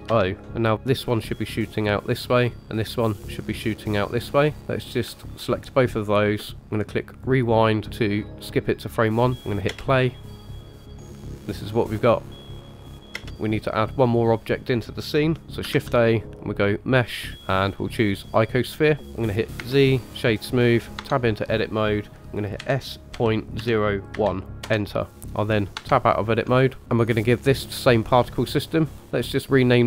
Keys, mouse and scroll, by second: 5.2 shift+click, 7.0 click, 9.7 space, 13.1 space, 13.3 click, 15.7 shift+a, 19.6 z, 21.0 Tab, 22.6 s.